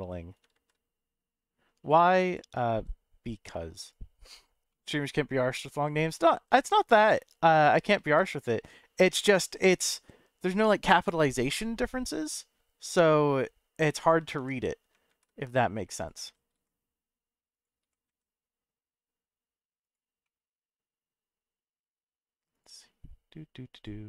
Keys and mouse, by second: 0.5 shift+z, 2.2 click, 2.7 s, 3.8 click, 4.8-5.8 middle drag, 6.6 shift+right click, 7.1-7.7 middle drag, 8.0 shift+a, 12.1 s, 14.0 click, 14.3 g, 15.1 shift+z, 16.0 click, 16.2 s, 16.5 z, 17.5 click, 17.8 g, 18.1 z, 19.8 click, 20.4-22.1 middle drag, 23.7 click.